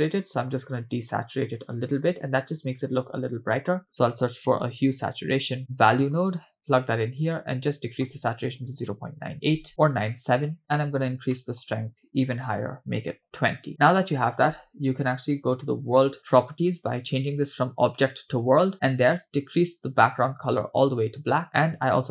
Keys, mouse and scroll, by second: 0.4-0.8 drag, 1.3-1.8 drag, 3.1 shift+a, 5.6 BackSpace, 7.7-10.0 drag, 11.3 middle click, 11.7-12.3 scroll up 1, 12.4-13.5 drag, 14.0 scroll down 3, 16.8-18.4 drag, 19.2 click, 21.6 click.